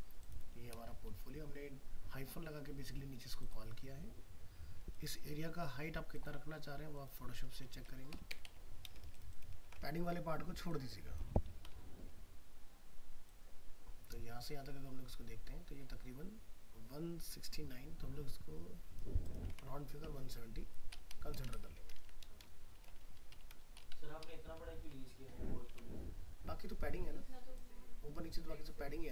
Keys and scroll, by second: 9.0 ctrl+space, 19.5 alt+Tab, 25.7 alt+Tab.